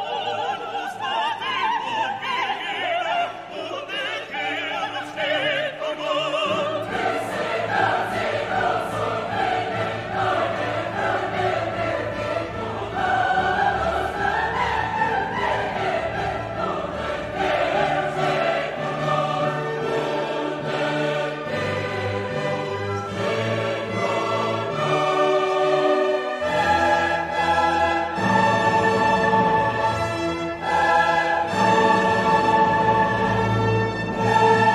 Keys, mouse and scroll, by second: 0.9 click, 1.3 click, 2.6-3.8 drag, 4.9 click, 5.6 click, 7.3-8.7 drag, 9.3 click, 9.7 click, 10.2 scroll down 2, 11.0 scroll up 2, 12.3 click, 13.0 click, 14.4 click, 15.4 2, 15.8 0, 16.9-17.9 drag, 18.5 click, 19.2 click, 20.4-21.7 drag, 22.2 click, 23.3 click, 25.5 click, 26.6 3, 26.9 5, 28.3-29.5 drag, 29.9 click, 30.7-33.3 drag, 33.7-34.7 drag.